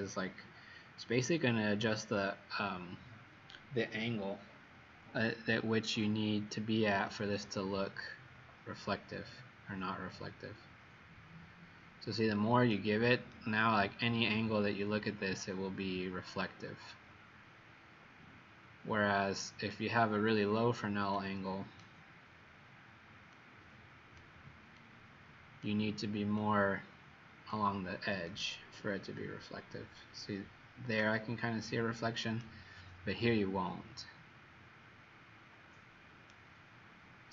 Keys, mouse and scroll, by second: 7.1 click, 13.4 right click, 21.1 click, 28.2 right click.